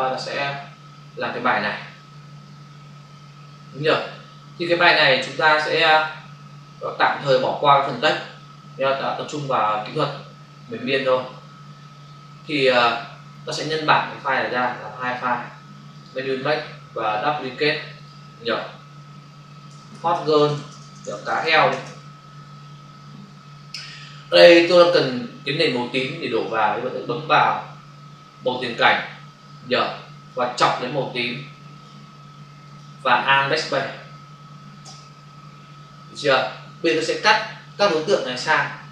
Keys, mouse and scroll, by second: 0.0 click, 14.4 click, 15.8 click, 17.9 click, 20.3-21.2 typing, 22.3 Return, 28.3 click, 29.7 click, 31.6 click, 32.6 click, 34.8 alt+BackSpace, 36.8 click, 37.7 ctrl+space.